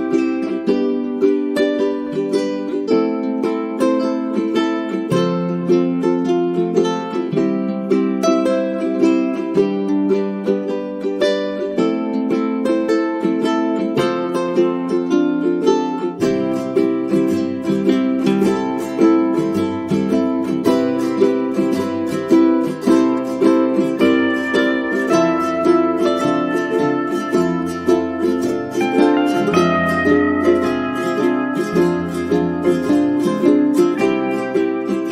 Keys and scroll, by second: 2.5 space, 4.8 space, 18.0 space, 25.3 space, 26.7 space.